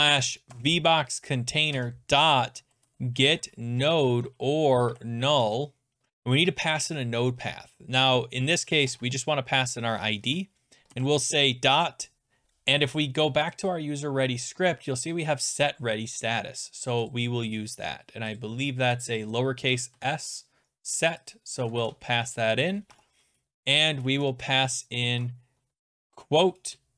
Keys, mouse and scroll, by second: 0.5 Return, 1.7-5.2 typing, 5.4 Tab, 8.6-9.3 typing, 10.2 Right, 13.6 click, 17.1 click, 18.4 click, 19.3 click, 19.4 click, 19.9 ctrl+c, 21.3 click, 21.7 click, 21.8 ctrl+v, 22.8 Return, 22.9 (, 24.4 ctrl+z, 25.0 ctrl+z, 25.7-26.9 typing.